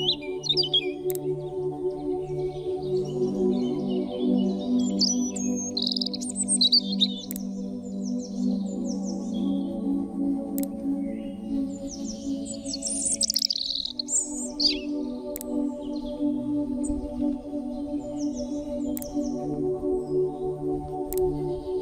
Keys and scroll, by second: 17.4 shift+m.